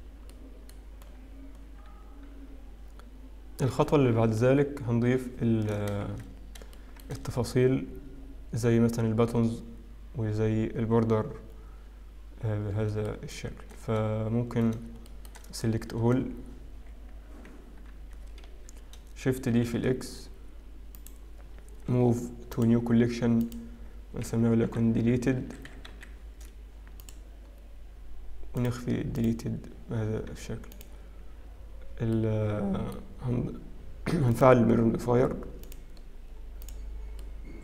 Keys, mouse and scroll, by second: 2.0 middle click, 2.0-3.6 scroll down 7, 5.5 KP_7, 6.2 shift+z, 6.8 shift+middle click, 7.4-7.9 scroll up 3, 13.1 shift+middle click, 15.2 shift+middle click, 15.2 scroll down 3, 16.1 a, 17.3 z, 19.6 shift+d, 21.9 m, 28.6 click, 30.2 click, 30.3 scroll up 1, 30.9 click, 30.9-31.9 scroll up 2, 31.9-32.4 scroll down 1, 32.4 middle click, 34.3 click, 35.6 click.